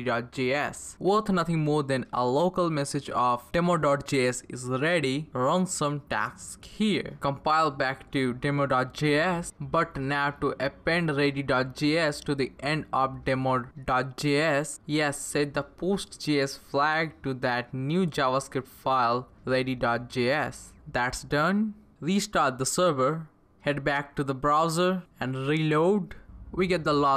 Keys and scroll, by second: 1.0-7.0 typing, 7.3 Up, 9.1-10.6 Left, 11.2 space, 16.0-20.3 typing, 20.9 Return, 22.2 ctrl+c, 22.6 Page_Up, 22.7 Return.